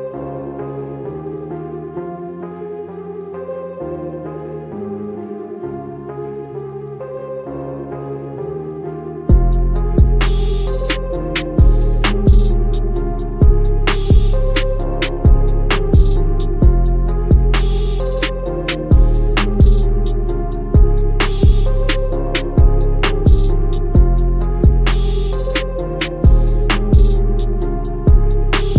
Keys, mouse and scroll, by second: 3.1 click, 7.7-9.7 typing, 12.0-19.6 drag, 20.4-21.0 drag, 22.8-24.0 click, 27.7 click, 27.9 click.